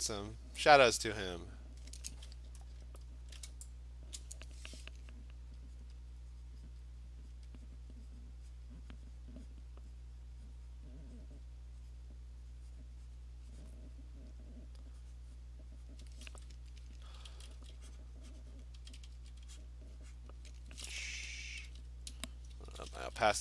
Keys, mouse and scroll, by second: 0.4 alt+click, 0.6 alt+click, 1.2 alt+click, 2.6-3.2 scroll, 4.2 click, 5.8 click, 6.5 click, 6.7 click, 7.4 click, 7.5 alt+click, 7.6 click, 7.7 click, 7.9 click, 8.2 click, 8.6 click, 9.2 click, 9.5 click, 10.0 click, 10.2 click, 10.5 click, 10.8 click, 11.2 click, 11.4 click, 12.0 click, 12.8 click, 13.4 click, 13.8 click, 14.0 click, 15.5 click, 15.9 click, 17.2 [, 17.4 [, 17.6 [, 18.0 click, 18.6 click, 18.8 ], 19.0 ], 19.2 ], 19.7 click, 20.2 click, 21.7 ], 22.9 [, 23.1 [, 23.3 [.